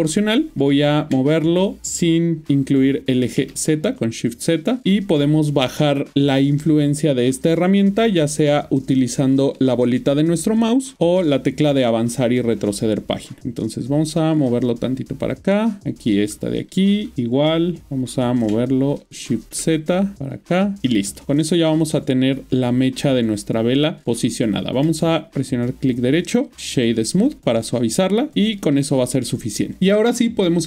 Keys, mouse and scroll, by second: 1.0 Left, 3.2 typing, 9.0-9.6 scroll down 2, 9.6-10.9 scroll up 19, 15.2 click, 18.3-19.3 typing, 20.8 Tab, 21.2 ctrl+middle click, 23.1 middle click, 24.1 ctrl+middle click, 25.5 right click, 26.9 click, 27.6 middle click, 29.8 click.